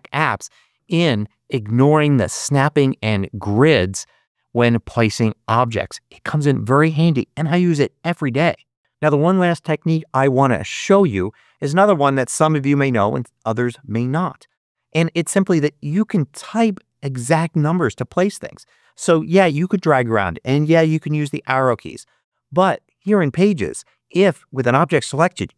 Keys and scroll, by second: 20.6 Up, 21.4 Down.